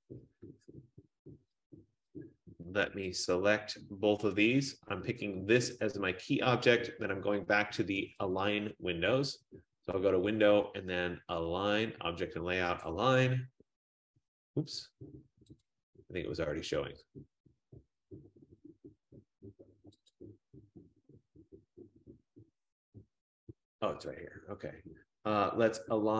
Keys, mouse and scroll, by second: 3.3 shift+click, 6.1 click, 8.4 click, 11.2 F15, 13.0 click, 15.7 click, 20.3 click.